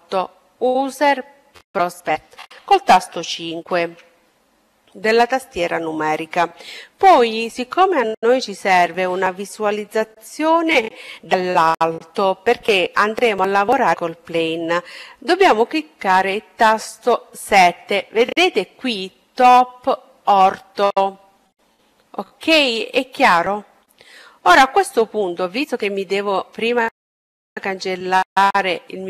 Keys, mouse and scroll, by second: 3.1 KP_5, 15.4 KP_7, 23.7-25.4 middle drag, 25.1-26.9 right drag, 25.9-26.9 middle drag.